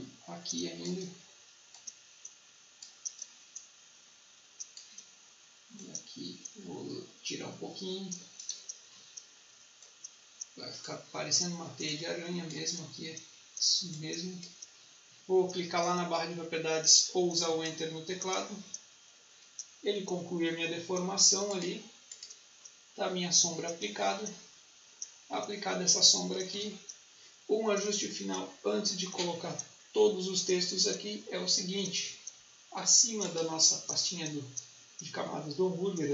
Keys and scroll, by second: 17.4 Return, 26.4 ctrl+s.